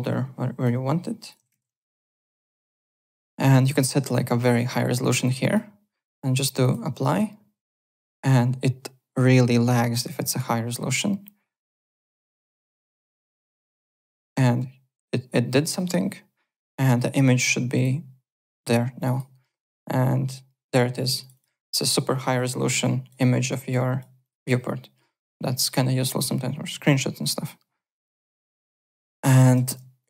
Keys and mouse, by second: 0.6 click, 1.1-2.2 typing, 1.2 click, 2.0 click, 3.5 click, 4.7 click, 5.4 click, 6.6 click, 15.7 click, 16.8 click, 17.7 click, 18.5 click, 21.2 click, 23.2 click, 23.7 click, 24.2 click, 27.3 click, 28.0 click, 28.5 click, 28.9 alt+click, 29.2 alt+right click, 29.5 `, 29.7 click, 30.0 click.